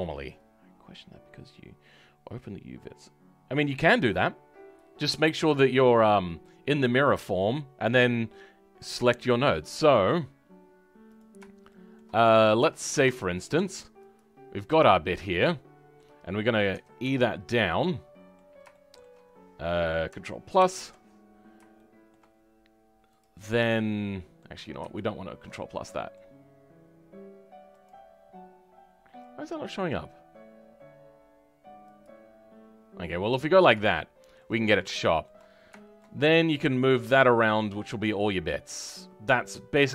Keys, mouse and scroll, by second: 9.0 scroll down 2, 9.6-11.0 scroll up 2, 11.0 click, 11.6 shift+middle click, 12.5 Tab, 12.7-13.0 scroll up 2, 13.0-14.1 shift+middle drag, 14.1 alt+click, 14.7-15.2 scroll down 2, 15.2-16.7 middle drag, 16.7 e, 17.8-20.5 middle drag, 20.5 ctrl+KP_Add, 23.0 click, 23.4-23.7 scroll down 2, 23.7-24.7 middle drag, 24.7 ctrl+z, 25.8-27.8 middle drag, 27.8-39.9 drag.